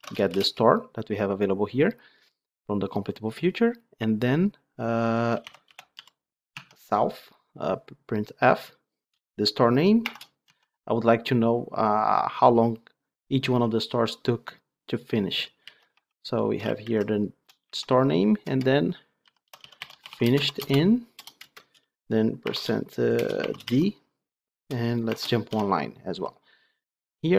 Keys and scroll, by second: 6.6 Tab.